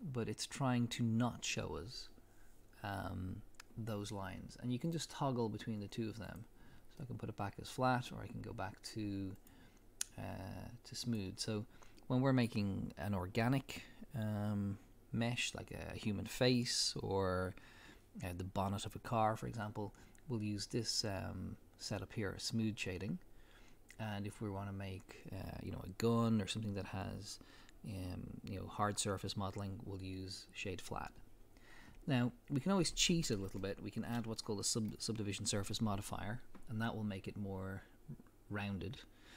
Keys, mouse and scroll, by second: 4.9-7.0 drag, 7.0-9.4 middle drag, 9.4-33.6 drag, 33.6-39.3 shift+middle drag.